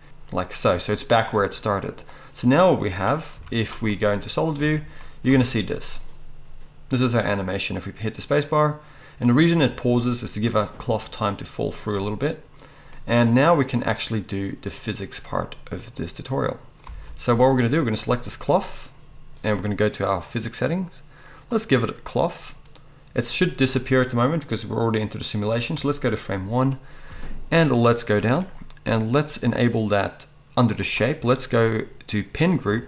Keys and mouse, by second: 3.3 z, 4.7 alt+a, 5.3 space, 16.8 space, 18.0-20.3 middle drag, 20.3 click, 20.4-21.5 middle drag, 21.5-32.8 drag.